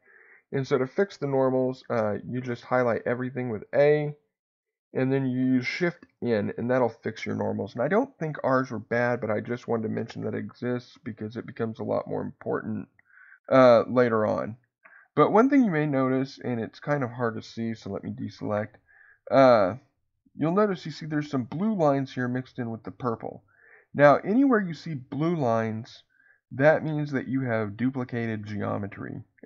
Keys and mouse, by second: 6.1 shift+n, 10.5 middle click, 12.3-13.6 middle drag, 17.9 a.